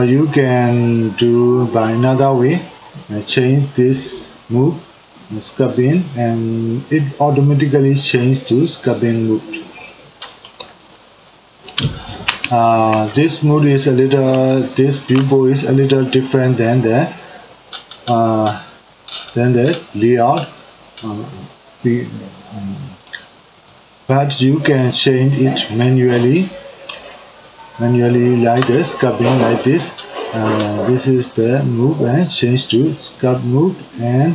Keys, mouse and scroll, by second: 5.5-10.9 drag, 10.9-20.2 middle drag, 20.2-23.8 drag, 28.3-30.6 middle drag, 30.6 click, 33.6-34.3 drag.